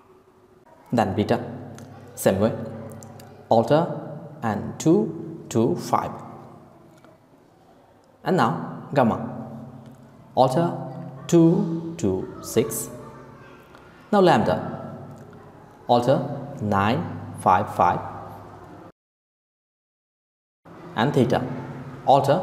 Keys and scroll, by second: 5.0-5.8 typing, 10.1-10.8 typing, 16.2-16.9 typing, 22.2-22.4 typing.